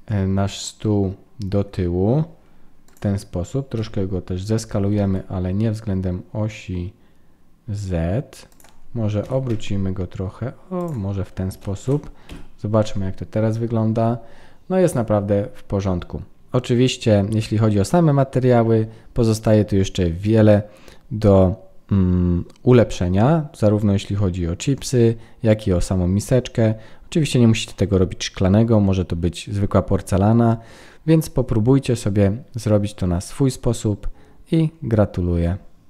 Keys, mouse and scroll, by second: 11.6 ctrl+s, 12.3 F12.